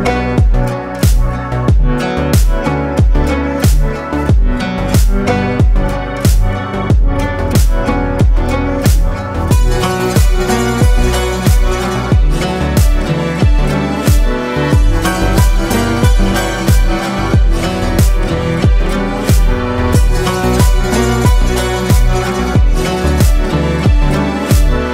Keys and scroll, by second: 2.5 ctrl+space, 3.2 ctrl+space, 7.8 shift+Up, 8.2 shift+Up, 8.4 shift+Up, 8.6 shift+Up, 18.7 ctrl+space, 19.4 ctrl+space, 23.4 ctrl+shift+space, 24.7 ctrl+shift+space.